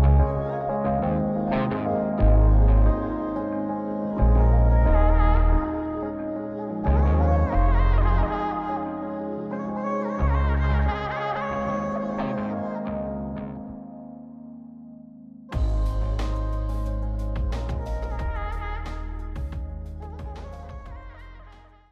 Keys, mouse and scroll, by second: 0.2 scroll down 3, 0.6 middle click, 0.9-1.3 scroll down 2, 1.2-2.0 middle drag, 2.3-3.2 drag, 3.4 click, 4.2 KP_7, 6.4 KP_5, 6.9 KP_5, 8.7 g, 11.2-13.0 middle drag, 13.3 scroll up 1, 13.9-14.3 scroll up 4, 14.3-14.6 scroll down 2, 14.6-19.2 shift+middle drag, 14.9-15.4 scroll up 2, 19.0-19.6 scroll up 4, 19.6-21.6 shift+middle drag.